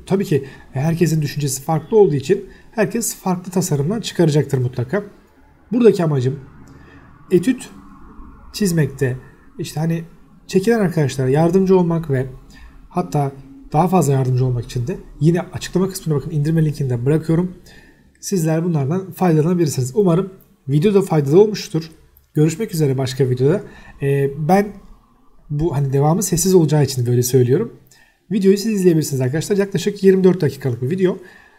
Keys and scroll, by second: 0.0-0.3 typing, 0.7 Escape, 1.6 l, 1.6 space, 2.3 Escape, 2.6-5.1 typing, 3.7 Escape, 4.5 Escape, 5.5 Escape, 6.1-8.4 typing, 6.8 Escape, 7.5 Escape, 8.1 Escape, 9.5 Escape, 10.5 t, 11.2 Escape, 11.6 r, 11.9 space, 12.4 Escape, 12.6 o, 12.7 space, 14.1 Escape, 14.2-15.6 typing, 15.2 Escape, 16.2 Escape, 17.4-19.3 typing, 17.7 Escape, 18.6 Escape, 20.4 x, 20.5 space, 21.4 space, 23.4 Escape, 26.2-28.5 typing, 27.8 Escape, 29.5 Return, 30.0 Escape, 30.2 e, 30.5 space, 31.1 Escape.